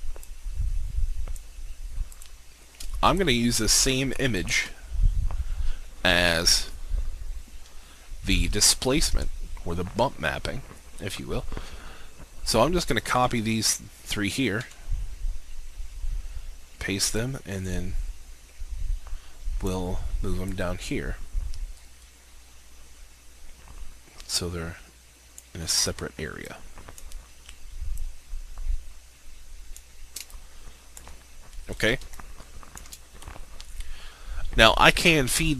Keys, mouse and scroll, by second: 0.4-1.7 drag, 3.2 shift+click, 13.2 ctrl+c, 14.8 ctrl+v, 17.2-30.0 drag, 30.4 alt+shift+click, 31.8-32.2 scroll up 1, 32.3 alt+shift+click, 33.4-33.8 scroll up 1.